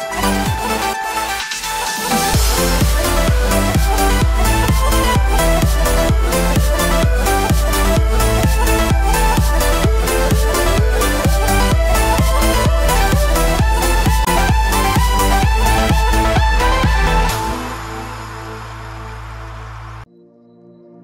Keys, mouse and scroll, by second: 5.9 click, 7.3 click, 7.9 click, 10.3 BackSpace, 10.4 BackSpace, 12.9 click, 14.2 click, 16.6 alt+a, 16.8 Tab, 17.1 alt+a, 17.2-17.7 scroll down 5, 17.7 shift+middle click, 18.1 middle click, 18.4 scroll down 1, 18.7 shift+middle click, 19.1 middle click, 20.8 middle click.